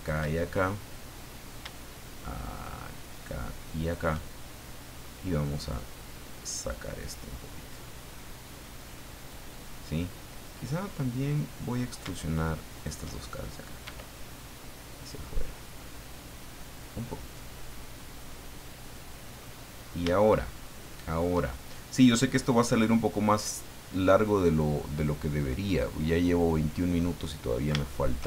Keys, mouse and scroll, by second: 0.3-1.4 shift+middle drag, 3.1 shift+right click, 3.8 shift+right click, 4.7 middle click, 5.7-9.5 drag, 10.3 right click, 10.8-11.9 middle drag, 12.7 shift+right click, 13.8 e, 16.9 click, 17.3-19.5 middle drag, 19.7-20.2 scroll up 3, 20.2 shift+middle click, 20.9 shift+middle click, 22.9 click, 26.4 click, 27.4-27.9 scroll up 4, 27.9 shift+middle click.